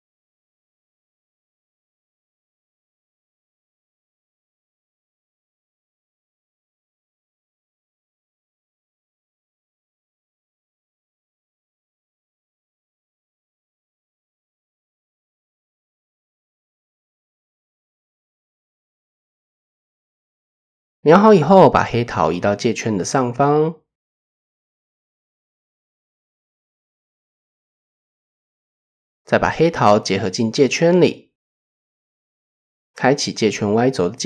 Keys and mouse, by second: 1.2-2.4 drag, 3.7 click, 4.1 click, 5.4 shift+click, 6.7 click, 9.1 click, 9.7 click, 10.9 shift+middle click, 11.6 shift+middle click, 12.4-14.1 drag, 15.2 Tab, 17.4 click, 18.3 click, 19.7 KP_1, 20.7 shift+middle drag, 21.3-22.4 drag, 23.6 KP_3, 24.5 shift+click, 25.2 click, 25.7-26.1 drag, 26.9 click, 28.9-29.2 shift+drag, 30.0 ctrl+j, 33.0 click.